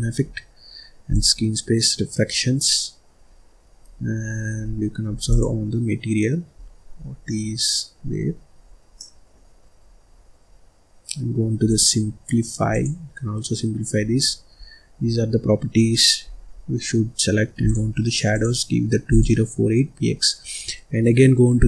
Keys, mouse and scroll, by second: 0.2-1.0 scroll down 3, 1.0 click, 3.7-5.8 scroll down 4, 6.0 click, 6.9-7.2 scroll down 2, 7.2 middle click, 8.1-8.9 scroll up 6, 8.9-10.1 middle drag, 10.1 scroll down 1, 11.9 click, 12.7 click, 13.9 scroll up 1, 14.2-14.8 scroll down 7, 14.9-16.0 scroll up 6, 16.2-17.0 scroll down 6, 17.6-21.3 drag.